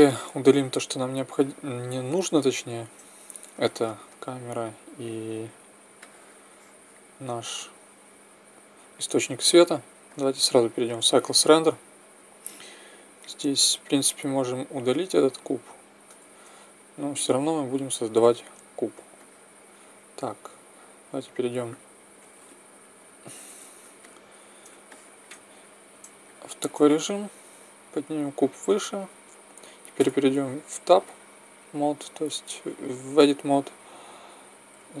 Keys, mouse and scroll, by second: 1.2-4.1 right drag, 3.5 x, 10.1-12.0 drag, 12.0-13.2 middle drag, 13.2 right click, 14.4 x, 15.0 right click, 16.2 shift+a, 21.1 KP_1, 23.0 KP_5, 27.5-30.0 drag, 30.0 Tab, 34.7 z.